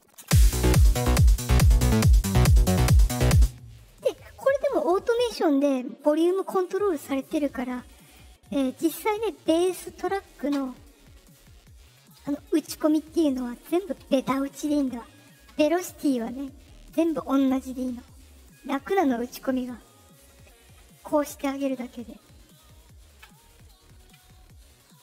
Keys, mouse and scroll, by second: 0.1 space, 3.3 space, 7.8 click, 8.0 click, 11.3 middle click, 11.3 scroll, 12.2 click, 13.3 click, 13.8 Return, 18.3 click, 18.8 click.